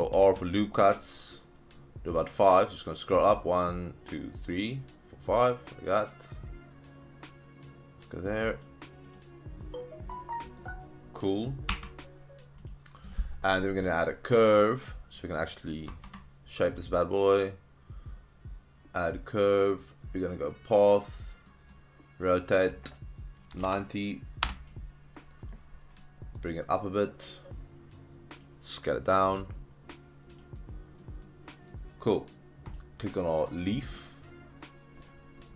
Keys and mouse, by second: 0.4 ctrl+r, 9.1 click, 10.1-10.6 middle drag, 11.7 Tab, 12.6 click, 13.9-14.5 middle drag, 14.8-15.2 middle drag, 15.9 shift+a, 21.4 middle drag, 22.3-24.8 drag, 23.5 KP_9, 24.4 KP_Enter, 24.4 KP_0, 26.0-26.4 middle drag, 27.4-28.4 drag, 29.3 s, 30.3 click, 30.6-31.0 middle drag, 31.2-31.7 middle drag, 32.1 middle drag, 33.1 middle click, 33.6 shift+middle drag.